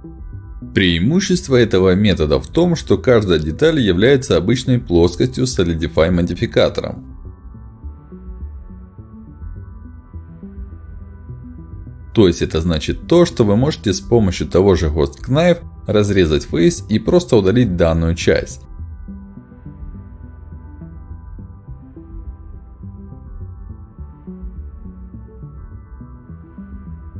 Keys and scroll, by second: 2.8 ctrl+shift+x, 4.6 ctrl+shift+x, 5.2 Escape, 5.8 ctrl+shift+x, 8.6 space, 10.2 space, 12.0 ctrl+shift+x, 21.8 space, 26.9 Delete.